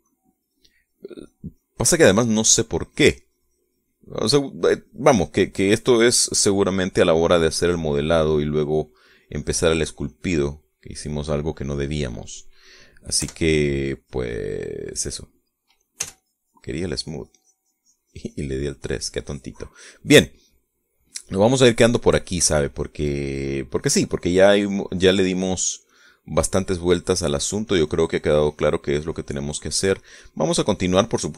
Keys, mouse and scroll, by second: 0.7 3, 1.4-11.7 drag, 11.8 middle click, 12.6 middle click, 14.5 3, 14.7-16.1 drag, 17.3 s, 17.5-21.4 drag, 21.7-23.5 shift+middle drag, 23.6-25.0 shift+drag, 28.4-31.3 drag.